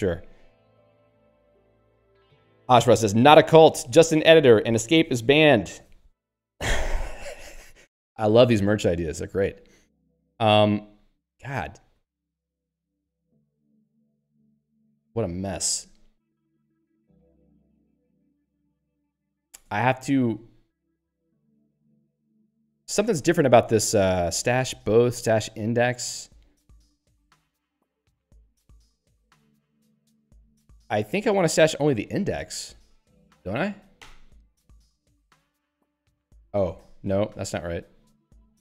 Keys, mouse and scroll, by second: 0.3 n, 1.2 Tab, 1.4 n, 8.6 Tab, 11.9 p, 13.0 n, 15.8 q, 18.7 ctrl+alt+;, 19.6 Tab, 20.3 j, 21.0 ctrl+g, 21.4 z, 22.6 ctrl+g, 23.1 z, 27.6 z, 28.3 ctrl+g, 28.7 z, 29.3 ctrl+g, 30.0 z, 34.0 i, 35.3 Return, 36.3 ctrl+g, 36.7 z.